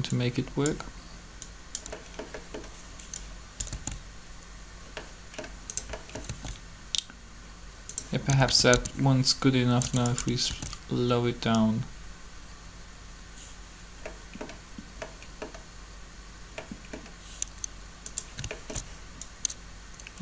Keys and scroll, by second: 3.7 alt+a, 6.3 alt+a, 8.3-8.7 typing, 9.7 2, 10.5 alt+a.